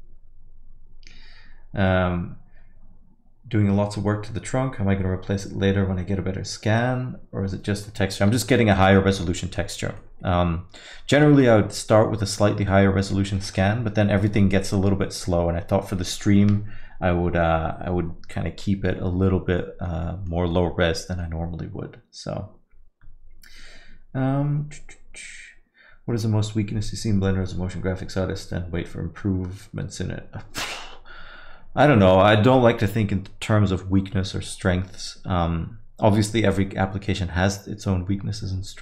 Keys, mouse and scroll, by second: 7.9 middle click, 8.6 alt+middle click, 9.1 middle click, 9.4 middle click, 9.5 alt+middle click, 9.8 scroll up 2, 10.0 alt+middle click, 11.7 middle click, 12.7 middle click, 19.6 alt+middle click, 20.0 middle click, 20.4 scroll down 1, 20.5 alt+middle click.